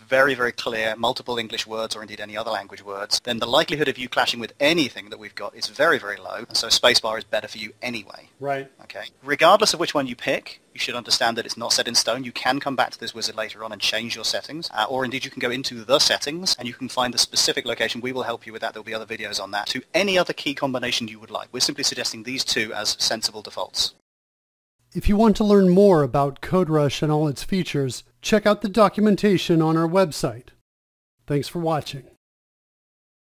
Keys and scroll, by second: 0.0-0.2 typing, 1.1 Down, 1.3 Return, 1.4 r, 1.7 space, 2.5 Return, 5.0-6.9 typing, 7.1 Return, 8.0-12.8 typing, 12.9 Insert, 13.2 Return, 14.3-16.0 typing, 16.6 Return, 17.0-22.6 typing, 23.2 Return.